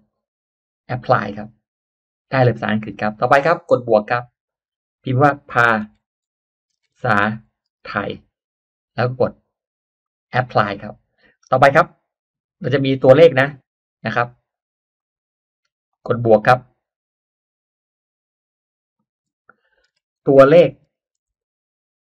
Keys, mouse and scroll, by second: 1.1 click, 3.8 click, 5.3-8.5 typing, 10.0 click, 14.9 click, 15.8 click, 19.7-22.1 typing.